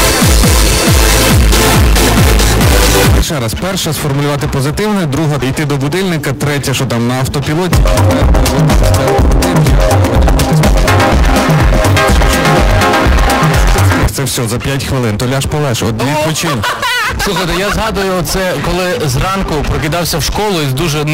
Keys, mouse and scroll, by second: 3.2 Page_Down, 14.1 Page_Down.